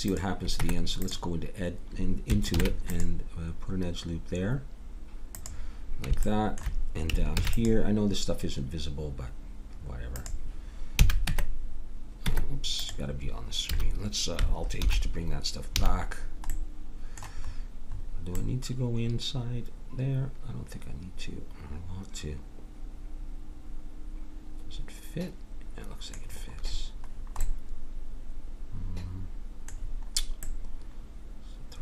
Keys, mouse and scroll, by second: 0.6 Tab, 2.5 ctrl+r, 7.3 ctrl+r, 11.0 a, 11.3 Tab, 12.2 Tab, 13.7 a, 14.7 alt+h, 15.7 a, 27.4-29.0 middle drag.